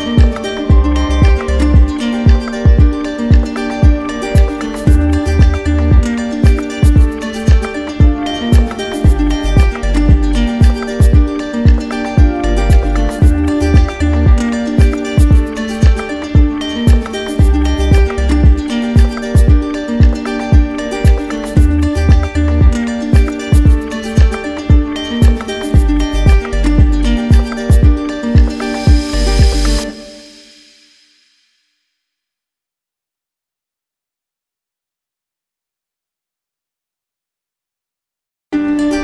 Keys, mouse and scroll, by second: 2.5 alt+click, 2.9 right click, 3.7 shift+click, 4.4 shift+click, 4.9 shift+click, 5.3 shift+click, 6.3 right click, 9.6 alt+click, 13.9 d, 16.5 right click, 17.3 shift+right click, 17.8 shift+right click, 18.3 shift+right click, 19.0 shift+right click, 19.6 shift+right click, 20.2 shift+right click, 20.7 shift+right click, 22.1 shift+right click, 22.6 shift+right click, 24.0 z, 24.1 shift+click, 24.7 click, 25.8 right click, 26.8 right click, 27.4-28.4 drag, 30.2-31.4 drag, 31.6-32.6 drag, 33.2 click, 33.9 right click, 35.7 click, 36.8 right click, 37.8 click.